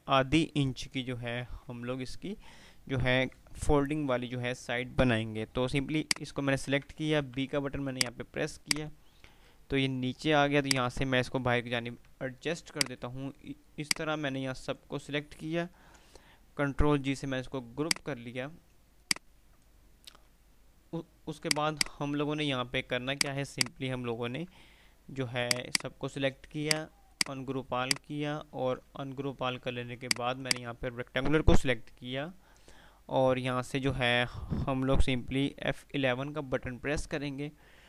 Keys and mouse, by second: 5.8 shift+click, 7.4 b, 7.8-9.6 drag, 12.1 F3, 12.8-15.1 drag, 16.0 ctrl+g, 17.3 p, 18.0 click, 18.7 F2, 19.1 click, 19.4-20.0 F2, 21.6 click, 23.0 click, 23.7 ctrl+click, 27.7 F2, 28.0 click, 28.6 F2, 30.1 click, 31.8 typing, 36.4 F11.